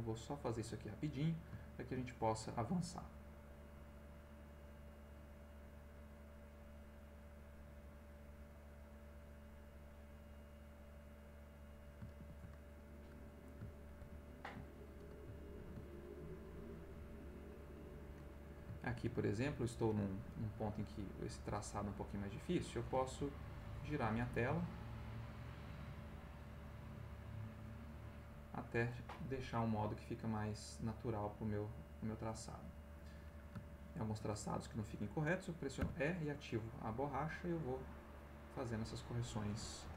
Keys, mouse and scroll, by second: 1.3 ctrl+middle click, 3.2-7.2 drag, 7.8-9.4 drag, 10.0 click, 11.0 click, 12.2 ctrl+x, 14.0 ctrl+z, 15.6 ctrl+z, 16.4-18.7 drag, 18.8 ctrl+z, 23.1-24.1 shift+middle drag, 25.2-27.2 drag, 27.9 click, 28.6 click, 30.4 click, 30.8 click, 31.4 click, 32.2 click, 33.1 middle click, 33.6 ctrl+middle click, 35.8 e, 36.1 click, 37.6 click, 38.5 click.